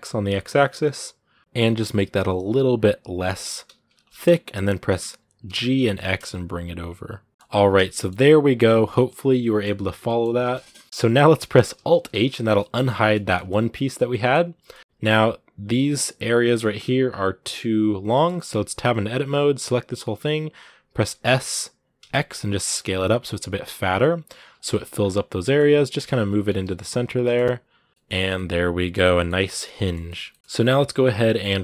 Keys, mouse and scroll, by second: 3.7 scroll up 2, 4.3-4.9 scroll down 1, 4.9-5.3 scroll up 1, 5.3 g, 7.3 middle click, 7.5 a, 7.7 middle click, 8.0 Tab, 8.2 scroll down 2, 8.4-10.4 middle drag, 10.4 scroll down 1, 10.5 middle click, 10.7 a, 10.8-11.9 middle drag, 11.9 alt+h, 12.4-13.8 middle drag, 13.8 a, 13.9 middle click, 14.8-17.7 scroll up 3, 17.9 shift+middle click, 18.3 Tab, 18.6 scroll down 2, 18.8 a, 24.8 scroll up 2, 25.2 g, 28.0 scroll down 3, 28.1-29.2 middle drag, 29.2 scroll down 2, 29.3-30.9 middle drag, 30.9 right click.